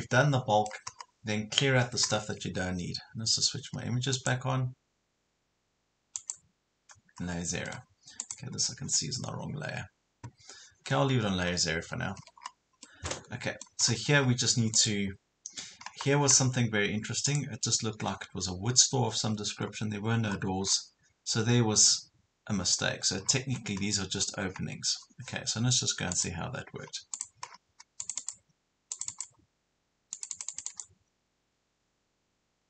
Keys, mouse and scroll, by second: 0.1 middle click, 1.1 scroll up 1, 2.1 scroll down 1, 4.2 click, 7.2 scroll down 1, 7.7 middle click, 8.2 click, 11.2 scroll down 1, 12.0 Escape, 12.4 scroll up 1, 12.8 middle click, 13.8 scroll up 1, 14.8 click, 19.6 scroll up 1, 22.8 scroll down 1, 26.2 click, 27.5 scroll down 1, 28.0 click.